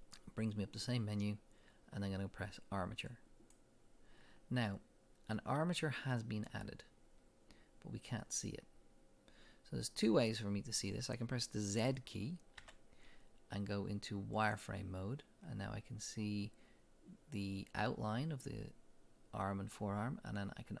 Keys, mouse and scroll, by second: 9.0-10.3 drag, 12.6 z.